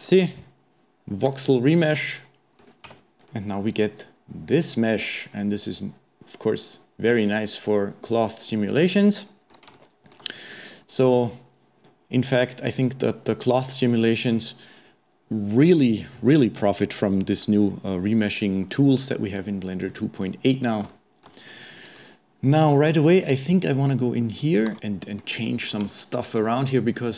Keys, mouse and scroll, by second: 1.3 click, 2.2-2.9 middle drag, 2.9 Tab, 3.3-6.5 middle drag, 9.8-13.6 shift+middle drag, 19.6-20.0 scroll up 1, 20.0-24.5 middle drag, 25.6-25.9 scroll up 1, 25.9-27.1 shift+middle drag.